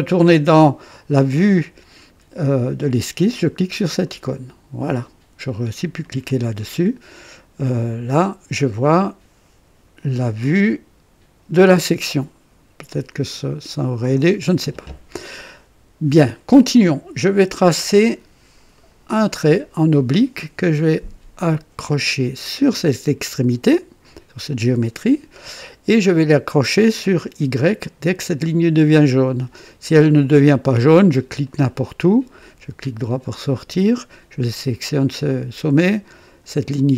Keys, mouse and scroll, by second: 4.0 click, 6.0 click, 13.3 click, 15.4 right click, 18.7 click, 22.7 click, 31.4 click, 32.1 right click, 33.9 click, 36.2 click.